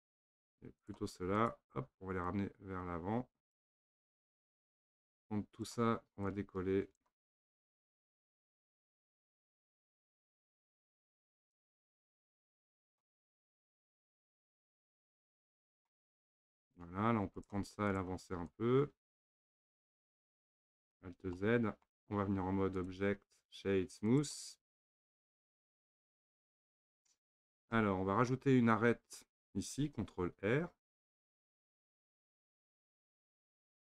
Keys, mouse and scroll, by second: 0.0-0.8 middle drag, 0.8 click, 1.4 shift+click, 2.3 click, 3.8-5.1 middle drag, 5.1 click, 6.2 click, 8.1 click, 9.5 click, 11.1 drag, 12.1 click, 13.1-16.1 middle drag, 17.4 click, 17.9 shift+click, 18.5 click, 19.9-21.0 middle drag, 21.0 alt+z, 21.4-22.3 middle drag, 22.3 Tab, 22.8-24.7 right drag, 24.7 Tab, 25.1-30.8 middle drag, 31.4 ctrl+r.